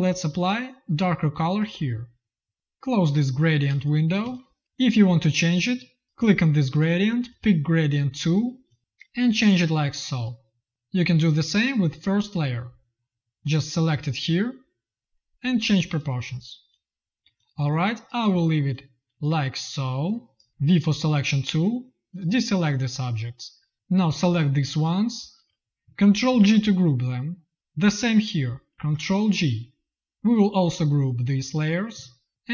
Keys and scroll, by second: 3.6 space, 4.1 z, 4.6 v, 20.7 v, 26.2 ctrl+g, 28.6 ctrl+g.